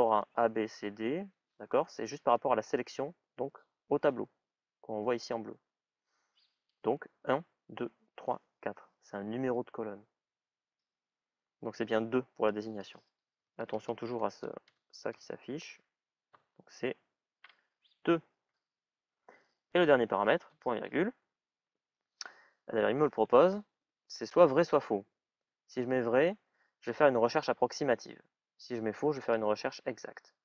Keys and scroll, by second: 13.0 typing, 17.8 shift+é.